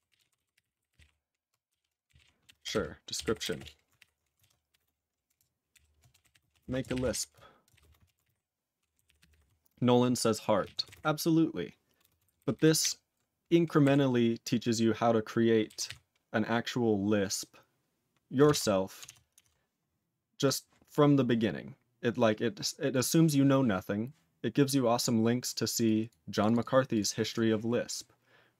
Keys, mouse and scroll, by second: 3.6 Return, 4.0 ctrl+y, 4.4 ctrl+a, 4.7-7.8 typing, 8.0 ctrl+a, 8.2 ctrl+e, 8.3 ctrl+g, 9.1 ctrl+=, 10.6 ctrl+a, 10.8 ctrl+space, 10.9 ctrl+g, 12.0 ctrl+space, 12.3 ctrl+alt+b, 12.4 ctrl+alt+b, 12.5 ctrl+alt+b, 12.8 ctrl+alt+b, 13.8 ctrl+g, 15.9 ctrl+s.